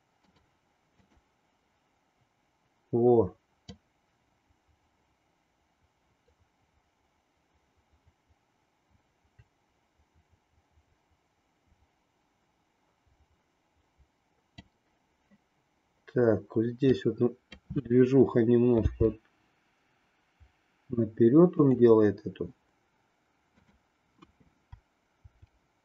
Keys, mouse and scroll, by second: 1.0 click, 3.7-14.7 drag, 16.9 click, 18.9 g, 25.2 r.